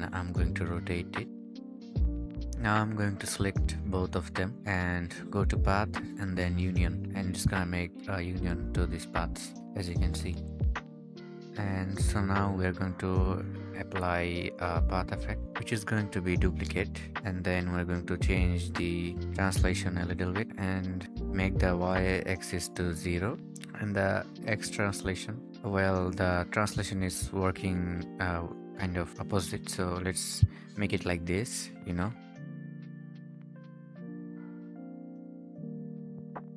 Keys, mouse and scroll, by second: 0.4 r, 2.5-3.2 scroll down 1, 13.1 right click, 17.6-18.2 scroll down 1, 27.2 typing, 27.4 Return, 32.7 typing.